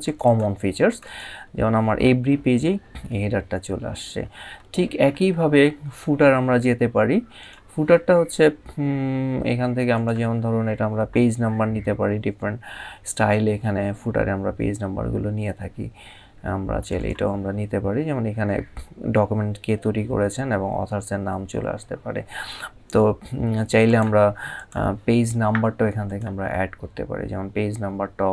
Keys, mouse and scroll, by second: 1.4 scroll down 1, 3.8-4.4 scroll up 2, 7.1 click, 9.6 click, 12.2 scroll down 1, 16.4 scroll down 1, 16.6 click, 23.6 click.